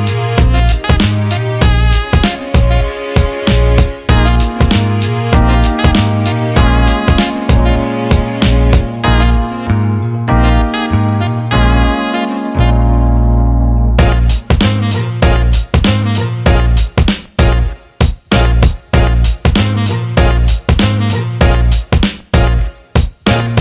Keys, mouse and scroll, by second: 0.4 click, 1.6-3.5 drag, 4.2 alt+middle click, 4.8 click, 12.4 click, 15.1 Tab, 17.4 click, 18.9-19.9 drag, 22.9-23.6 shift+drag.